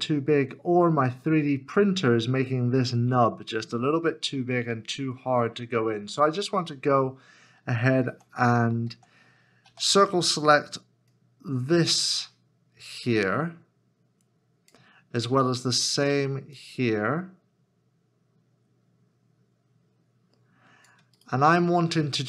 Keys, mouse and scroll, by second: 8.1 alt+z, 8.9 alt+z, 21.2 right click.